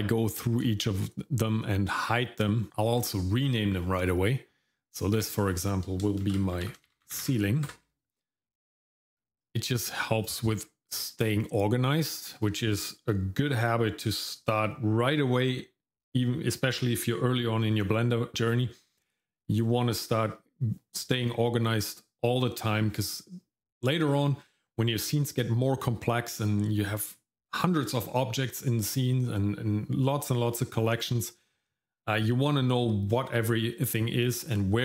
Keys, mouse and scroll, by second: 0.6 shift+middle click, 1.4 middle click, 3.0 click, 5.2 F2, 10.2 click.